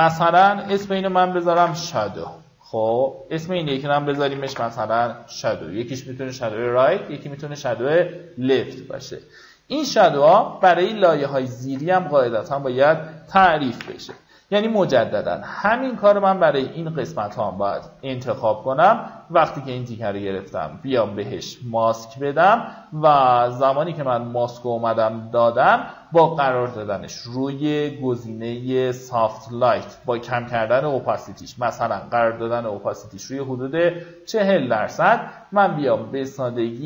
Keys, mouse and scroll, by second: 0.0-1.0 typing, 1.2 Return, 2.4 click, 3.2-4.5 typing, 8.6 ctrl+click, 10.8 ctrl+click, 12.3 click, 13.3 ctrl+alt+shift+n, 14.2 ctrl+alt+shift+b, 14.9 alt+right click, 15.4-16.9 drag, 16.9 d, 18.6 ctrl+click, 19.6-26.9 drag, 30.5 KP_4, 32.2-36.8 drag.